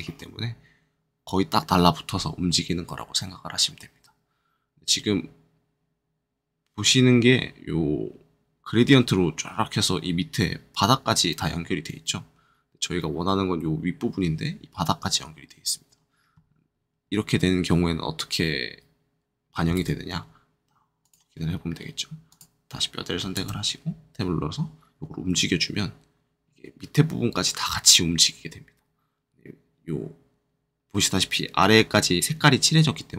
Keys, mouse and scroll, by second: 19.7 ctrl+Tab, 21.0 click, 22.2 click, 23.3 ctrl+Tab, 25.2 r.